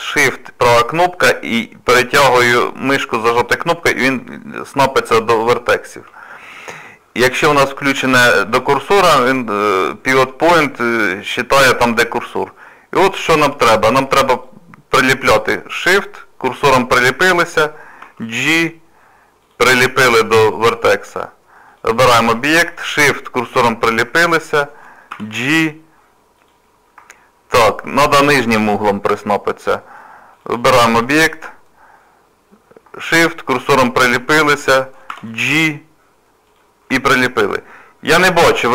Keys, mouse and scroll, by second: 0.4 shift+right click, 14.4 click, 16.2 shift+right click, 18.0 g, 21.7 click, 23.1 shift+right click, 25.1 g, 27.2 shift+middle click, 30.3 click, 33.3 shift+right click, 35.1 g, 37.0 shift+middle click, 37.6 middle click.